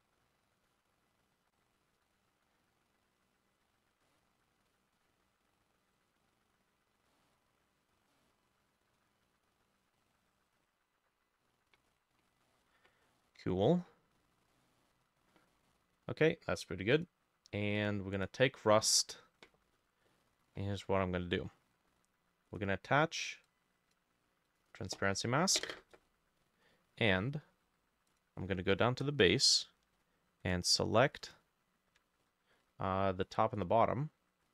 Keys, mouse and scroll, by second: 1.8 double click, 2.2 double click, 4.1 middle click, 7.1 middle click, 8.1 middle click, 11.9-12.5 scroll down 2, 12.5 middle click, 13.1 middle click, 13.3 middle click, 13.7-14.2 scroll up 2, 14.2-15.1 scroll down 2, 15.1 scroll up 1, 15.3 middle click, 18.2 right click, 18.9 Escape, 19.8 scroll up 1, 20.1 middle click, 20.9 scroll up 2, 22.5 right click, 26.0-26.7 scroll up 1, 26.7 scroll up 1, 26.7 scroll down 1, 32.2 ctrl+shift+a, 33.6 double click.